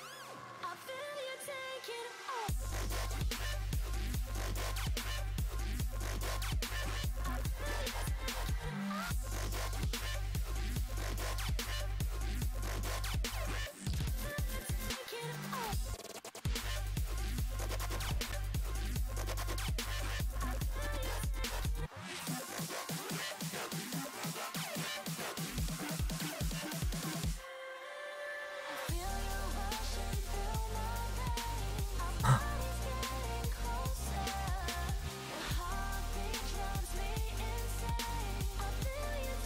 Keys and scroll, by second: 16.8 s, 29.3 s, 35.2 s.